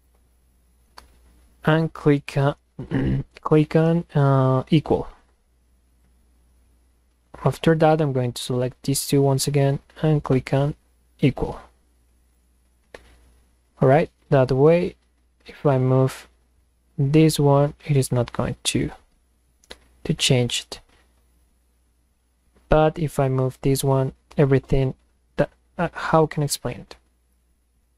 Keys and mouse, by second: 0.0 ctrl+click, 4.9 click, 5.9 click, 7.1 click, 8.7 ctrl+click, 11.2 click, 12.3 click, 13.7-17.6 drag, 18.0 click, 20.5-24.9 drag, 25.4 click.